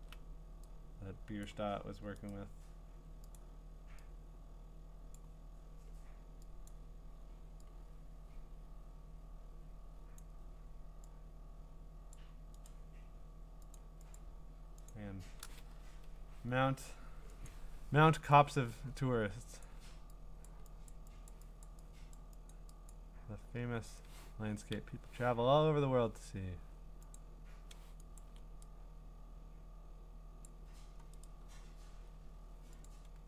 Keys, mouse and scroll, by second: 1.4 click, 2.3 right click, 3.4 click, 6.3 click, 6.7 click, 10.2 click, 12.1 click, 13.5 right click, 14.2 click, 14.9 click, 15.7 Escape, 17.5 click, 19.6 click, 20.5 click, 20.9 click, 21.3 click, 21.6 click, 22.1 click, 22.5 click, 22.9 click, 24.0 right click, 27.1 click, 28.2 click, 30.4 click, 31.2 right click.